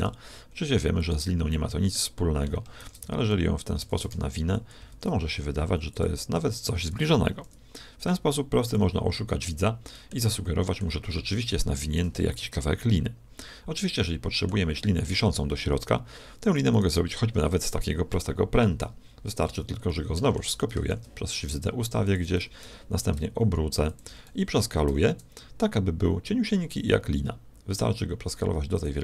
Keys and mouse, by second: 1.5-2.5 middle drag, 2.7 shift+d, 3.9 shift+d, 4.9 shift+d, 6.3 r, 9.3-13.5 middle drag, 13.9-16.5 middle drag, 16.7-18.4 drag, 18.6 KP_1, 19.8-21.7 middle drag, 20.9 shift+d, 22.5 r, 24.8 s.